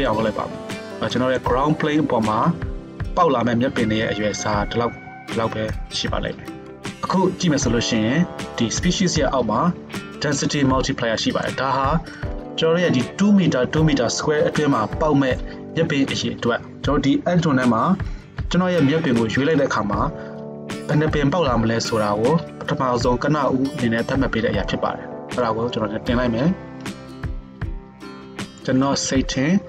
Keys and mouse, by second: 3.9 s, 6.7-29.6 middle drag.